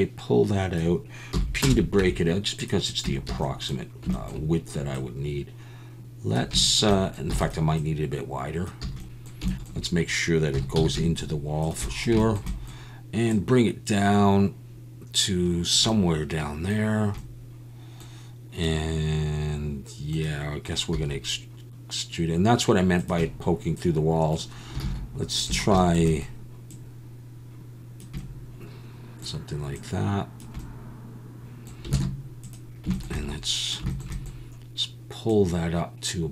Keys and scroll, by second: 1.3 p, 2.0 Tab, 3.0 Tab, 3.3 a, 7.3 e, 8.8 a, 10.5 s, 10.7 x, 20.9 s, 24.8 alt+a, 25.5 a, 32.0 alt+a.